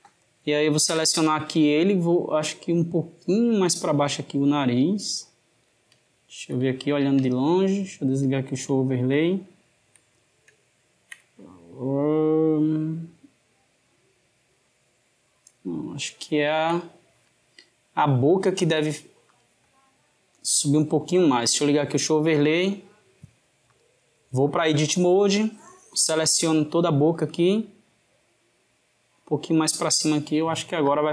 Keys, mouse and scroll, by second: 2.1 click, 6.0-7.5 ctrl+middle drag, 7.5 click, 8.6-12.7 shift+middle drag, 12.7 click, 16.1-17.8 shift+middle drag, 17.8-20.3 drag, 21.3-22.3 drag, 23.6-25.3 drag, 27.5 click, 30.7-31.1 drag.